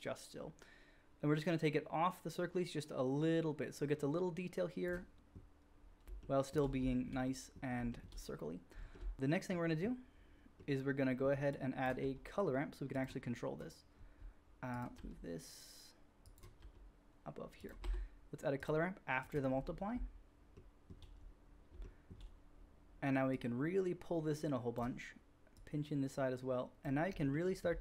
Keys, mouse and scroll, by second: 5.1-13.0 middle drag, 11.9 g, 13.0-16.2 drag, 16.2 middle click, 16.3-25.9 drag, 16.5 g, 17.8 q, 23.3-27.8 middle drag, 23.3-25.9 right drag.